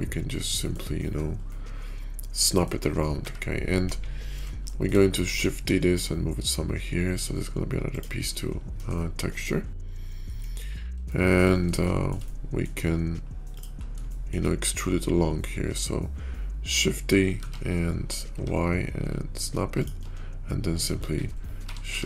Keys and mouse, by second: 0.5 middle click, 1.2-2.6 middle drag, 4.0 KP_5, 4.5 shift+middle drag, 5.1 shift+d, 8.8-9.4 middle drag, 9.9 shift+middle click, 10.5 KP_5, 10.8 shift+middle click, 11.7-12.0 shift+middle drag, 12.2-12.5 middle drag, 13.3-17.3 middle drag, 17.3 shift+d, 21.8 shift+r.